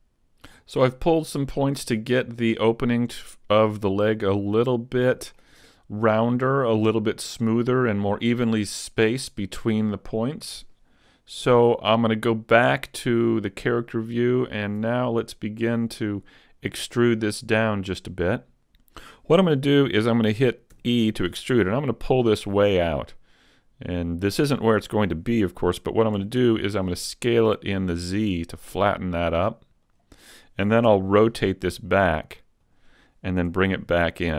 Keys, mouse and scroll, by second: 1.0 middle click, 6.1 middle click, 7.3 middle click, 9.7 middle click, 12.1 click, 14.3-15.3 scroll down 1, 15.3 scroll down 1, 20.7 e, 24.5 click, 26.2 s, 30.9 r, 32.7 click, 33.5 g.